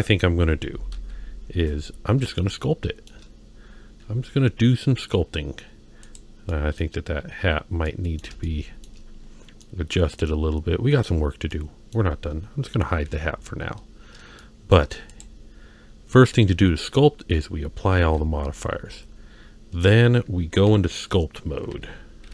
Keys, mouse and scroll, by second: 0.9 ctrl+KP_1, 2.0-2.4 scroll down 1, 2.4 shift+middle click, 5.2-6.0 scroll down 1, 6.0 click, 6.5-6.8 middle drag, 7.8-8.2 middle drag, 8.5-8.8 shift+middle drag, 9.6-11.1 middle drag, 11.5-11.9 middle drag, 13.1 h, 14.4-14.8 shift+middle drag, 15.1 click, 18.1 ctrl+a, 19.1-19.6 scroll up 2, 20.7 m, 22.2 n.